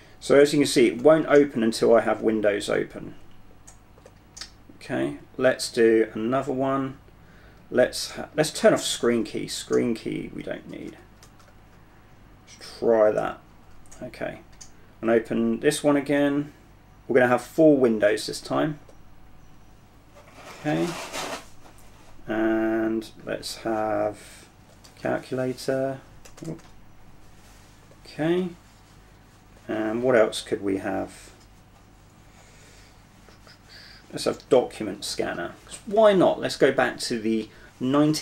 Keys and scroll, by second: 0.6 alt+g, 1.0 alt+g, 1.3 alt+g, 9.5 super+4, 10.3 super+3.